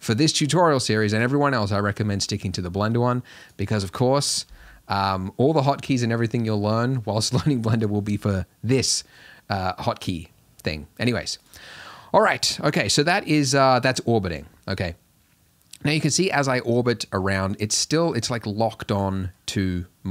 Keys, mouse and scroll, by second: 12.8-15.8 middle drag, 19.0-20.1 middle drag.